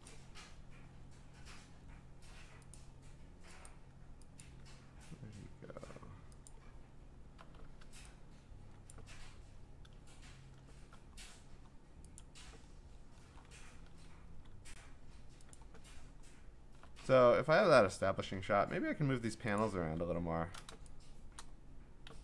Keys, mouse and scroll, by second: 0.1 click, 0.9-2.8 scroll, 2.8 click, 3.7 click, 4.4 click, 5.1-6.5 scroll, 6.5 click, 6.5-7.3 scroll, 7.6 v, 8.9 click, 9.1 ctrl+z, 10.2-10.6 scroll, 11.1-11.7 scroll, 12.2 click, 13.2 scroll, 15.5 click, 16.0-16.3 scroll, 19.6 click, 20.0-20.6 scroll, 21.4 click, 22.0 m.